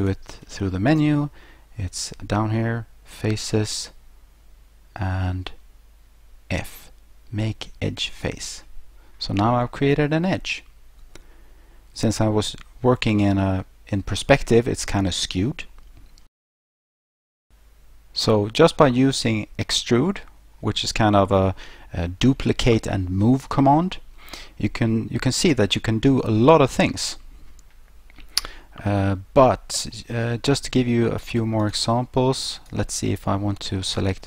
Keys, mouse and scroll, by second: 0.0 click, 8.1 click, 9.6 middle click, 9.6-10.0 scroll, 11.3-11.7 scroll, 16.3 ctrl+z, 17.1 ctrl+z, 19.8 shift+middle click, 20.9 middle click, 29.9 middle click, 31.6 shift+right click, 32.5 shift+right click.